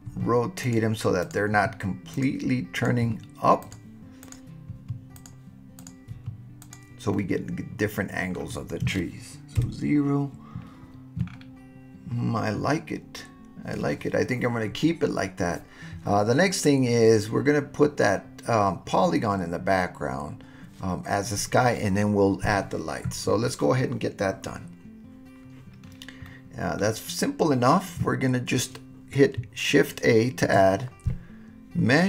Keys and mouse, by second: 0.1 r, 0.6 click, 1.2 click, 1.5 r, 2.1 click, 3.4 r, 3.6 click, 4.7 r, 5.2 click, 5.8 click, 6.1 r, 6.6 click, 7.1-8.4 middle drag, 9.6 KP_0, 26.3-26.8 middle drag, 30.5 shift+a.